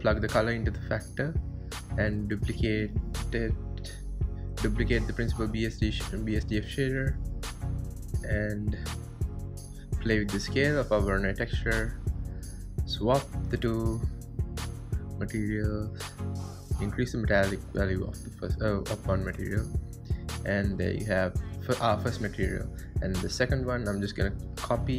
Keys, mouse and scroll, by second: 0.1 click, 1.3 drag, 1.9 ctrl+shift+click, 2.8-3.6 middle drag, 3.6 click, 3.9 shift+d, 5.0-6.7 middle drag, 6.7 click, 8.8-9.8 drag, 9.8 scroll up 4, 10.1-11.6 drag, 11.9-13.0 drag, 13.0 middle drag, 13.2-13.6 ctrl+shift+drag, 16.0 scroll down 4, 16.7-17.0 scroll up 3, 17.0-17.5 scroll down 1, 22.8 click, 23.9-24.9 drag.